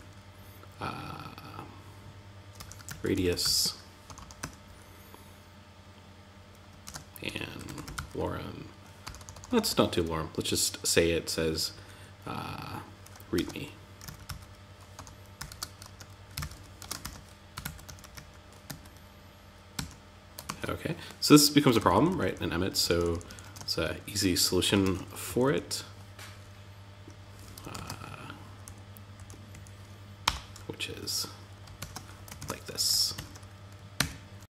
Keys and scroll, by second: 6.2 shift+>, 12.7 shift+r, 16.4 shift+&, 19.1 Tab, 19.8 super+z, 21.1 alt+Left, 22.2 alt+shift+Right, 24.6 Left, 27.1 super+z, 27.2 \, 28.0 Left, 28.9 Right, 31.7 super+Right, 33.3 Tab.